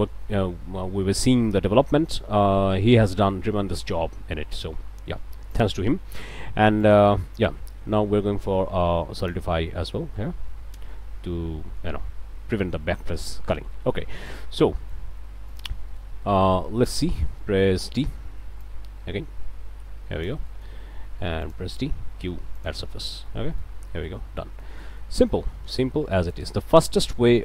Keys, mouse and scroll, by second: 0.0 click, 1.0 middle click, 1.9 middle click, 2.4 scroll up 1, 2.8-4.0 middle drag, 5.5 click, 6.8 click, 9.2 click, 10.7-12.0 drag, 13.0 scroll down 1, 13.3 click, 13.8 scroll up 2, 14.0 click, 14.4 a, 14.7 scroll up 2, 14.9 alt+click, 15.1 alt+a, 15.5-16.6 alt+scroll up 2, 16.7 alt+shift+click, 17.4 click, 17.9 d, 18.6-20.4 drag, 20.5 click, 21.4 alt+click, 22.0 alt+q, 22.6 click, 23.3 click, 23.5 middle click, 23.8 scroll down 2, 24.2-25.2 middle drag, 25.4 middle click, 26.0 a, 26.3 middle click.